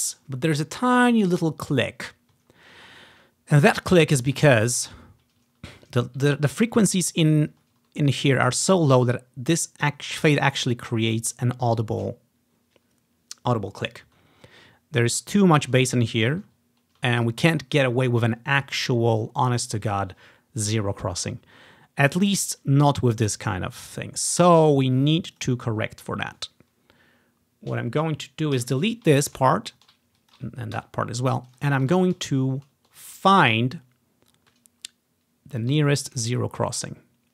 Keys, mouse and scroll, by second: 2.6-3.9 ctrl+scroll up 2, 4.7-5.7 scroll up 5, 5.7-6.4 ctrl+scroll down 1, 6.9-7.6 scroll down 1, 8.0-9.5 scroll up 1, 14.4-14.8 scroll down 1, 16.2 ctrl+scroll down 2, 16.8 ctrl+scroll up 2, 17.4 click, 23.8-25.5 ctrl+scroll down 1, 25.5 click, 28.7 Delete, 29.7-30.3 scroll down 1, 30.3-32.8 drag, 30.9 Delete, 32.3-33.6 ctrl+scroll up 1, 33.6-34.0 ctrl+scroll down 1, 34.0 ctrl+scroll up 1, 34.8 ctrl+scroll down 1, 35.3 scroll up 1, 36.4 scroll down 1, 36.8 ctrl+scroll up 1.